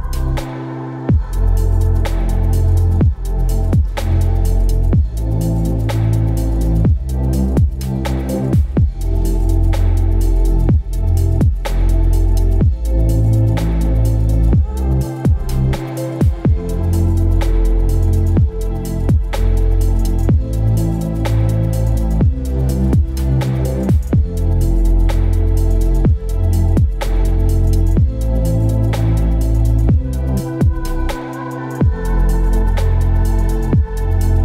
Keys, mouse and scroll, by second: 1.5 alt+click, 4.3 ctrl+t, 27.7 ctrl+t.